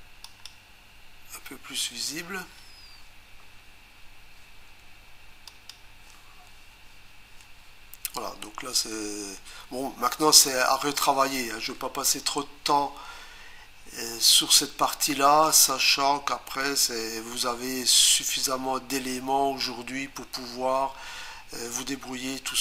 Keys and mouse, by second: 0.2 click, 5.5 click.